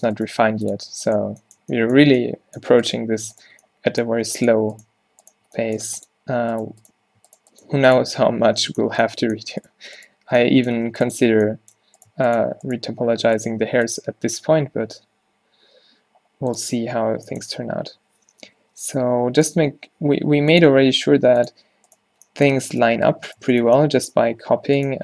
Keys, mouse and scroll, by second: 0.5 x, 1.1-2.9 middle drag, 4.3 x, 5.9 x, 7.6 click, 7.8 x, 11.0 x, 13.7 x, 17.0-19.1 typing, 20.4 g, 21.2 g, 22.1 z, 24.3 g.